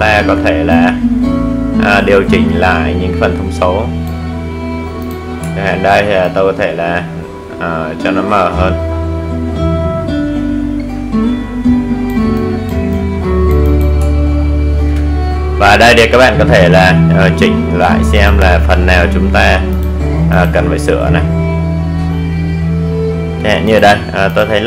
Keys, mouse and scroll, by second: 2.2-2.6 alt+scroll up 1, 2.8-10.6 drag, 11.2 alt+scroll down 1, 15.0 click, 20.4 click, 23.5-24.6 drag.